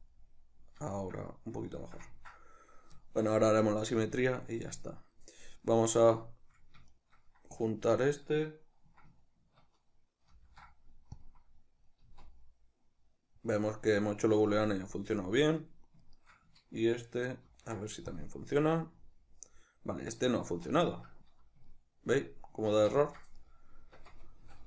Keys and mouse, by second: 0.1 click, 0.1-5.6 middle drag, 5.6 right click, 6.9 shift+right click, 10.3 ctrl+shift+b, 12.0 z, 12.5-15.3 middle drag, 14.5 z, 15.3 right click, 16.1 shift+right click, 17.5 ctrl+shift+b, 19.0 z, 19.4-23.4 middle drag, 20.5 z, 22.8 ctrl+z, 23.4 right click, 24.0 Tab, 24.5 a.